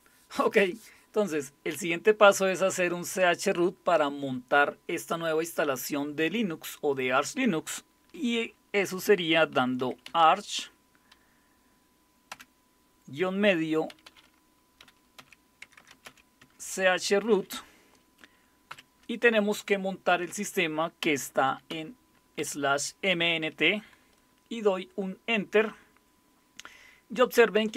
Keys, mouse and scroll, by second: 9.3-10.7 typing, 12.3 typing, 13.7-16.5 typing, 18.5-19.2 typing, 21.4-22.4 typing.